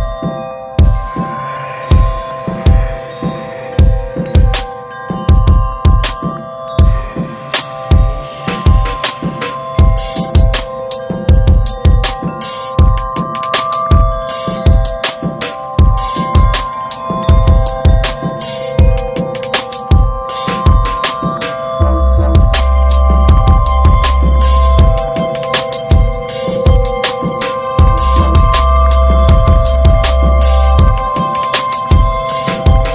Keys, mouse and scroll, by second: 0.3 alt+z, 0.6-2.3 middle drag, 2.3 scroll up 1, 2.6 alt+middle click, 3.0 alt+z, 3.3 scroll up 1, 3.6 shift+middle click, 4.4 e, 5.4 middle click, 6.0 alt+z, 6.3-6.7 scroll down 1, 6.7-13.1 middle drag, 8.4 alt+z, 13.1 alt+z, 13.5 middle click, 15.8 alt+middle click, 16.5 click, 17.4 scroll down 3, 17.6 middle click, 17.9 alt+z, 18.1 middle click, 18.4 alt+z, 18.7 middle click, 19.5 click, 20.3 middle click, 20.8 scroll up 1, 21.0-22.7 middle drag, 22.7 s, 23.9 ctrl+b, 27.7 click, 28.0 middle drag, 28.2 scroll up 1, 28.4 ctrl+a, 28.7 drag, 29.0 scroll down 5, 29.1-29.5 middle drag, 29.5 drag, 29.7 scroll down 2, 29.9 middle drag, 30.1-31.0 ctrl+scroll up 7, 30.2 ctrl+s, 30.7 Tab, 30.7 middle click, 31.0 middle click, 31.4 click, 31.6 shift+middle click, 32.4 scroll up 2, 32.7-32.9 middle drag.